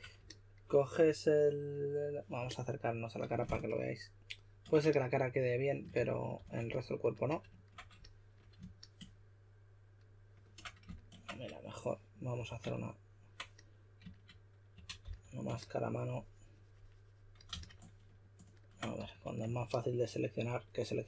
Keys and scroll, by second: 5.7-6.8 typing, 12.3 w, 14.5-15.5 typing, 17.5 super+a, 19.0 s.